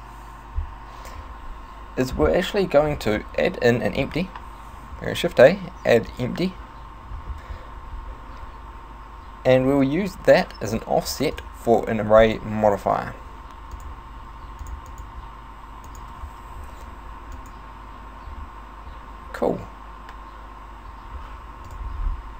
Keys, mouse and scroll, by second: 4.0 shift+a, 9.8 right click, 11.4 click, 13.8 click, 14.7 click, 14.9 click, 15.9 click.